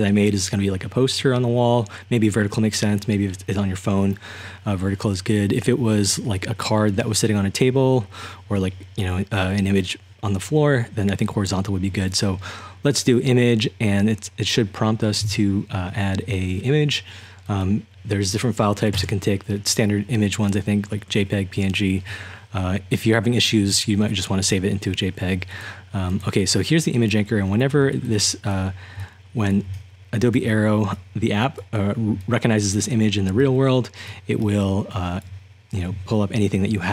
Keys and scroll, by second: 18.9 Return, 24.1-24.5 typing, 27.4-35.5 typing.